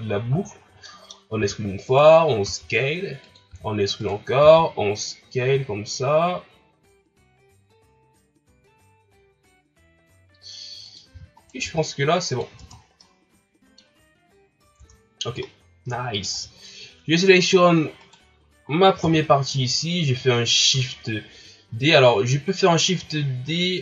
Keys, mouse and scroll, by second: 0.4-0.8 shift+scroll up 2, 0.8 middle click, 1.4 e, 3.5 e, 4.4 s, 11.1 e, 11.6 s, 12.6 Tab, 12.8 scroll down 3, 13.0 middle click, 14.0-14.8 scroll up 3, 14.8 Tab, 15.4 middle click, 16.3 Tab, 18.0 right click, 19.0 KP_3, 23.2-23.8 shift+scroll up 2.